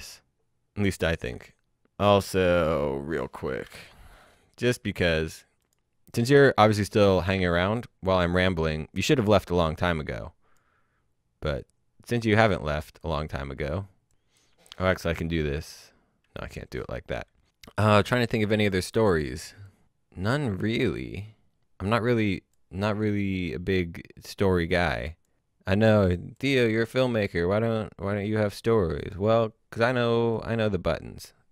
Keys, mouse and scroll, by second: 2.7 click, 3.6 l, 5.6 click, 7.4 click, 8.1-9.7 scroll down 1, 10.0 click, 16.7-17.1 scroll down 1, 17.1 click, 20.4 click, 29.0 click.